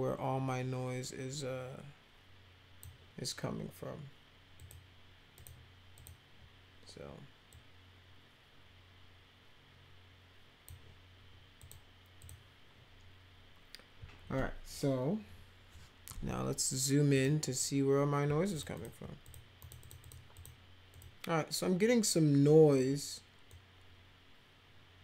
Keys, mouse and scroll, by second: 4.6 click, 5.3 click, 6.0 click, 7.5-10.6 drag, 11.6 click, 12.2 click, 15.2 ctrl+=, 17.1 click, 18.5 ctrl+click, 18.8 ctrl+click, 19.2 click, 19.6 click, 19.8 click, 20.0 click, 20.4 click, 20.9 click, 23.5-25.0 drag.